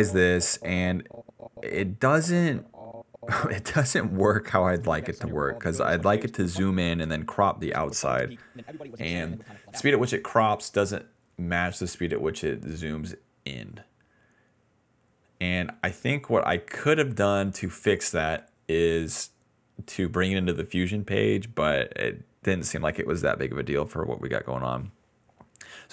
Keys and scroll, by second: 4.7 space, 6.5 space, 7.6 space, 9.9 space, 12.3 s, 13.0 s.